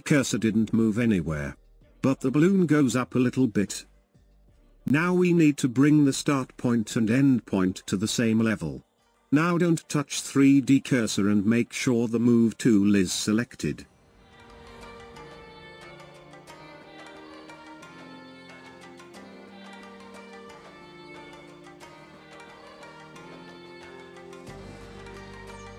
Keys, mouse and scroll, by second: 2.7-5.7 shift+drag, 10.2 space, 14.4 space, 16.1-17.7 scroll up 8, 18.0-19.8 middle drag, 18.0-19.9 scroll up 22, 20.7 space, 22.0 space, 23.0-25.5 shift+middle drag, 25.5-25.7 drag.